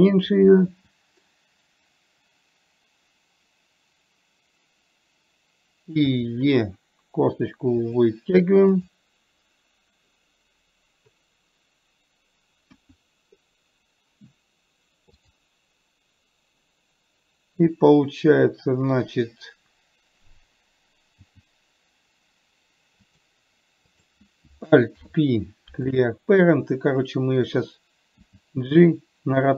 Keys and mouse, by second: 6.5 e, 9.1 click, 13.0 KP_1, 15.7 click, 21.6 g, 24.2 click, 25.4 alt+p, 28.5 g.